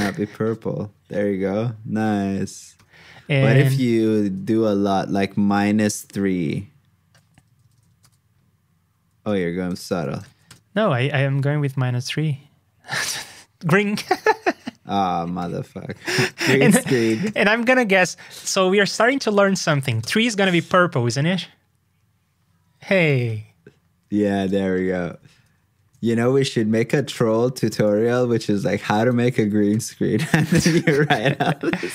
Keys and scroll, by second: 9.8 super+c, 10.2 super+v, 19.3 super+c, 19.8 super+v, 29.0 super+c, 29.4 super+v.